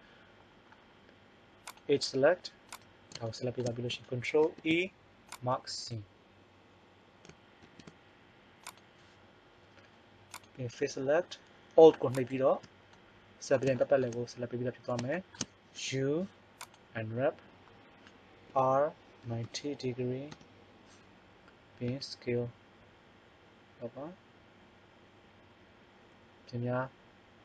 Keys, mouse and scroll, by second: 1.7 right click, 4.4 ctrl+e, 8.8 ctrl+e, 10.4-12.1 drag, 12.1 right click, 13.0 middle click, 15.7 u, 18.4 r, 21.0 middle click, 21.8 s.